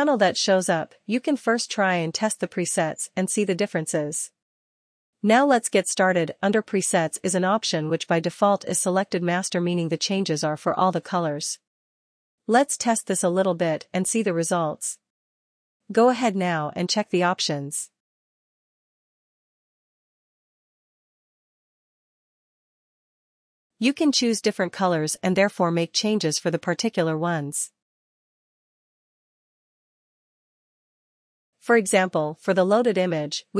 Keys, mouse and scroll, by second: 12.1 click, 14.8 click, 18.0 click, 19.5 ctrl+z, 20.3 ctrl+z, 21.1 ctrl+z, 23.7 click, 28.4 click, 30.4 click.